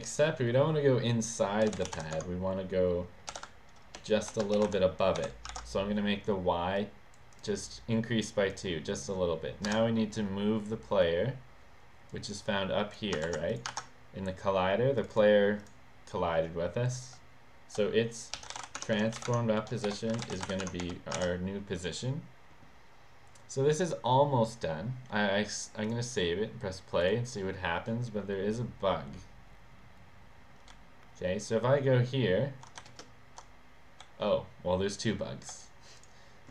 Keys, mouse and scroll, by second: 1.4-5.7 typing, 6.8 click, 7.3 click, 7.7 click, 8.5 click, 9.7 Return, 12.1 click, 13.3 ctrl+c, 13.5 click, 15.0 click, 15.1 click, 15.6 click, 18.1-20.8 typing, 20.7 Tab, 21.2 ctrl+s, 25.9 click, 30.8 w, 32.9 w, 34.1 s, 36.1 click.